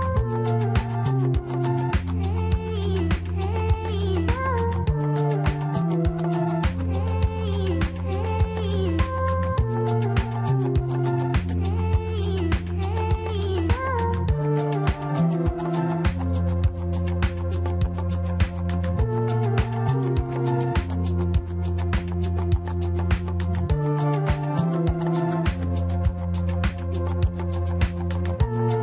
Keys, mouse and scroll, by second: 0.8-1.1 scroll down 3, 1.1-3.0 middle drag, 3.0 KP_3, 4.3-6.3 scroll up 1, 6.3 s, 10.4-12.0 drag, 12.0 Tab, 12.4-12.8 scroll down 3, 12.8-15.9 middle drag, 16.4-16.9 scroll up 2, 16.9-17.9 middle drag, 17.9-19.3 scroll up 2, 19.3 Tab, 20.1-21.5 middle drag, 21.5 Tab, 22.0 Tab, 22.9 KP_3, 23.8 shift+z, 25.1 click, 26.3 click, 27.4 shift+z, 27.9-28.8 middle drag.